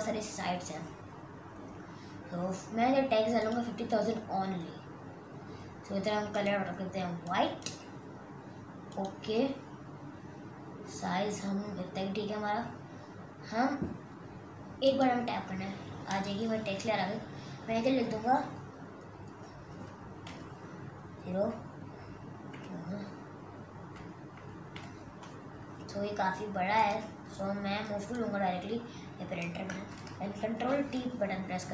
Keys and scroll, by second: 19.9 5, 20.3 0, 22.4 ,, 23.9 0, 24.3 0, 24.7 0, 30.5 ctrl+t.